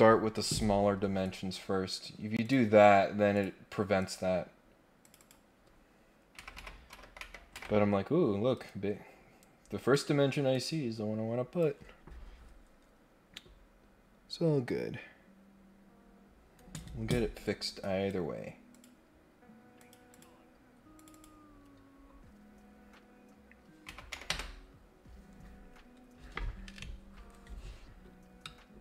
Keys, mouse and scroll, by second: 1.2 right click, 2.4 click, 3.3 click, 4.0 click, 5.0 click, 8.5 Escape, 9.8 Escape, 10.5-11.6 drag, 17.8 right click, 18.7 click, 19.8 click, 20.1 click, 20.9 click.